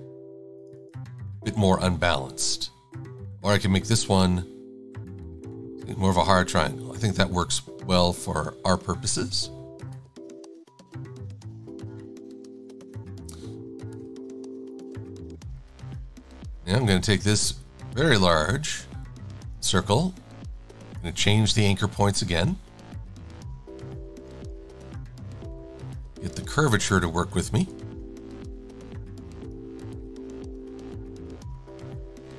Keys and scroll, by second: 11.6 super+-, 12.5 super+a, 17.7 v.